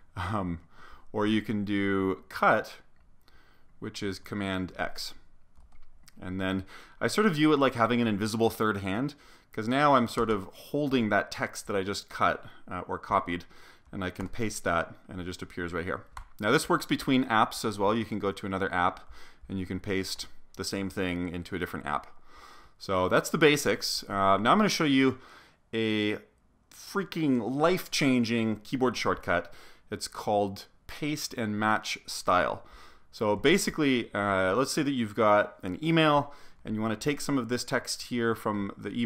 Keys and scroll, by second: 4.7 super+x, 5.6 super+s, 10.1 Return, 10.3 Return, 14.4 super+v, 16.3 Return, 20.2 super+v.